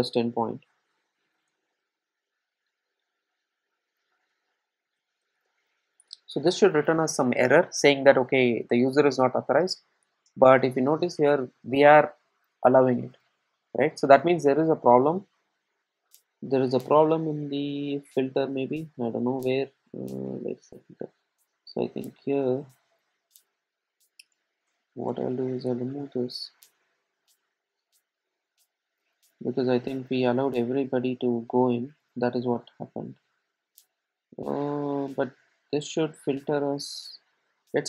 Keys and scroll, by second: 26.2 super+s.